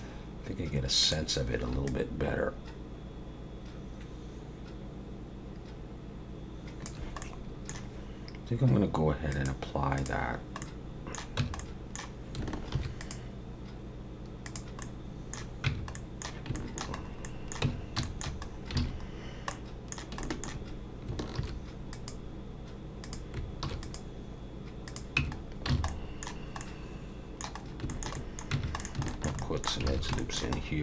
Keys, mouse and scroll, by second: 1.0 click, 1.9 shift+click, 7.2 middle click, 9.3 click, 10.6 middle click, 11.4 Tab, 11.6 middle click, 12.7 ctrl+r, 14.8 middle click, 15.7 Tab, 15.9 middle click, 16.6 shift+middle click, 17.0 scroll up 1, 17.2 middle click, 17.7 Tab, 18.0 shift+middle click, 18.4 scroll up 2, 18.8 alt+a, 19.2 scroll down 1, 19.5 middle click, 20.2 middle click, 21.4 ctrl+r, 23.6 ctrl+r, 25.2 Tab, 25.4 scroll down 2, 25.9 middle click, 26.6 middle click, 27.7 scroll up 1, 27.9 shift+middle click, 28.2 middle click, 28.5 Tab, 28.8 scroll up 1, 28.8 middle click, 29.1 shift+middle click, 29.4 middle click, 29.9 alt+a, 30.2 shift+middle click, 30.6-30.8 scroll up 1.